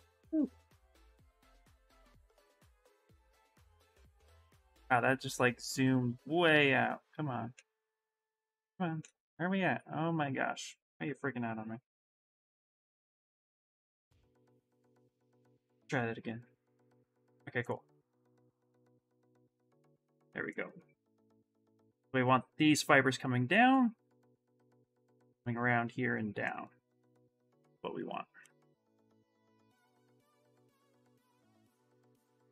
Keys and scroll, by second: 30.8-32.1 typing.